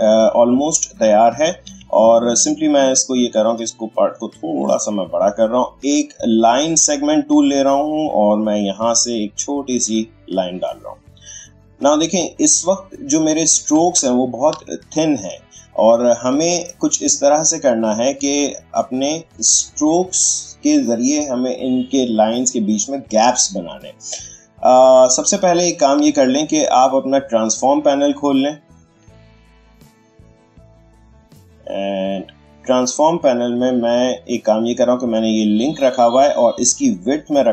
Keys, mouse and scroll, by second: 1.6 a, 1.8-4.9 drag, 8.7-11.1 drag, 11.1 click, 12.6 space, 12.7 click, 13.1 space, 14.0-17.0 ctrl+drag, 17.0-20.6 drag, 25.5 Tab, 27.2 click, 29.9-34.7 drag, 36.6-37.5 drag.